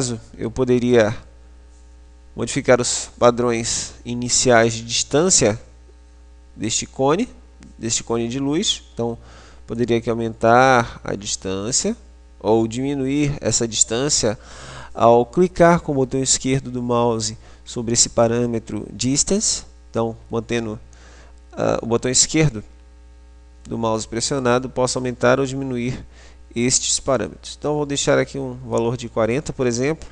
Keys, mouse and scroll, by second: 10.0 click.